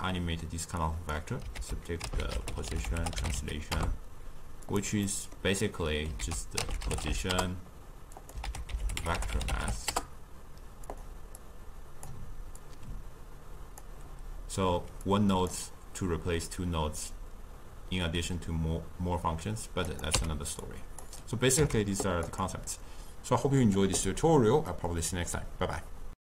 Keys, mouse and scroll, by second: 0.9-1.7 drag, 1.7 ctrl+a, 5.2-6.3 middle drag, 6.3 ctrl+a, 8.5 ctrl+a, 11.5-12.8 drag, 15.2 click, 20.0 click, 20.2 x, 20.7-21.7 drag, 21.7 x, 22.4 click, 24.8-26.2 middle drag.